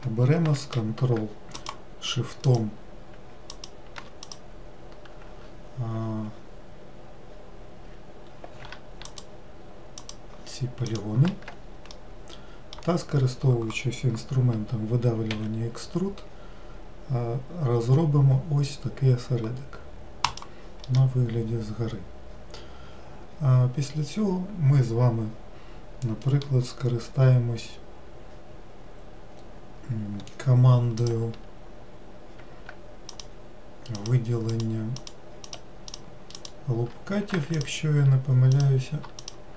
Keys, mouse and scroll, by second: 1.4 ctrl+shift+click, 2.3-3.5 ctrl+shift+drag, 4.1 click, 9.0 ctrl+shift+click, 9.9 ctrl+shift+click, 10.8 ctrl+shift+click, 11.8-14.9 middle drag, 15.2 e, 20.7-23.8 middle drag, 30.9 click, 33.0 alt+click, 33.8 alt+click, 34.4 alt+click, 34.9 alt+click, 35.3 alt+click, 35.8 alt+click, 36.2 alt+click, 37.4 shift+click, 38.4 click, 39.1 shift+click.